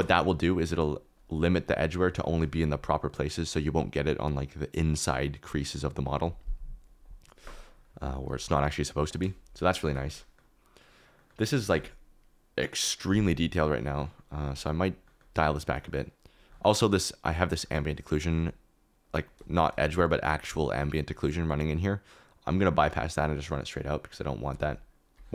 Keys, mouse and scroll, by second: 0.0 ctrl+space, 1.1 click, 1.4 KP_Decimal, 2.0 middle click, 2.2 shift+middle click, 9.8 shift+middle click, 10.4 middle click, 11.3 middle click, 13.8 click, 15.7 click, 17.7 click, 18.3 click, 22.3-23.4 drag, 24.5 ctrl+z.